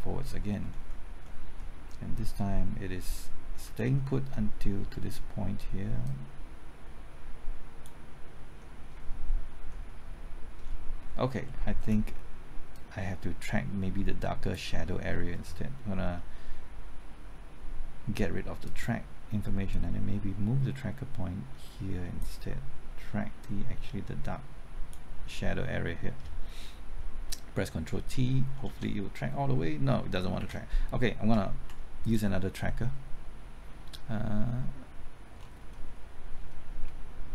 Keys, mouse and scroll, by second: 0.2 alt+Right, 0.6-1.3 typing, 3.0 typing, 3.6 Left, 3.8 alt+Right, 6.0-8.6 drag, 8.9 typing, 9.7 alt+Right, 11.8 Left, 12.7-25.6 drag, 27.5 typing, 28.9 ctrl+t, 30.3 typing, 30.4 ctrl+z, 31.6 x, 32.0 click, 35.3-35.7 scroll down 1, 35.8-36.3 scroll up 1, 36.3-36.7 scroll down 1, 36.7-37.3 scroll up 1.